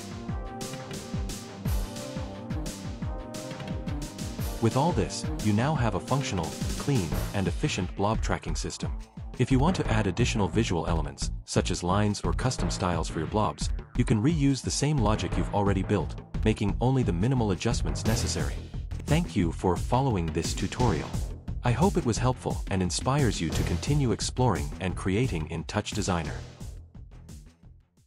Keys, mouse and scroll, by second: 0.6 ctrl+v, 0.9-2.9 typing, 3.4 Return, 5.4 click, 5.9 click, 8.7 alt+4.